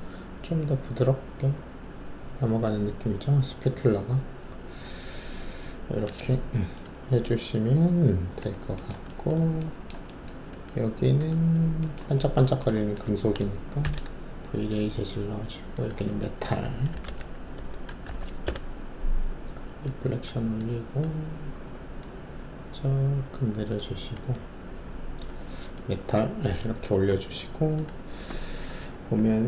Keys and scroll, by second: 13.8 alt+shift+v, 16.9-18.0 typing, 18.4 Return.